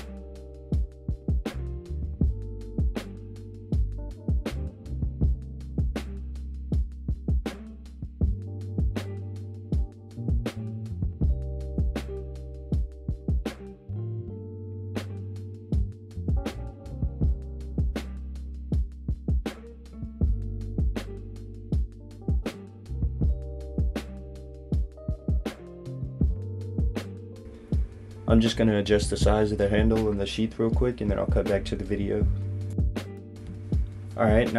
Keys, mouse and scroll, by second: 0.5 middle click, 3.4 click, 3.7 middle click, 4.5 click, 8.6-10.0 scroll down 3, 10.0 middle click, 10.8-11.1 scroll down 3, 11.1 middle click, 14.5 middle click, 16.3 click, 16.8 middle click, 17.5 middle click, 18.5 a, 18.9 middle click, 19.4-19.8 scroll up 3, 19.8 middle click, 22.0 click, 25.7 Tab, 26.5 click, 27.5 middle click, 29.5 s, 32.7 click, 33.0 middle click.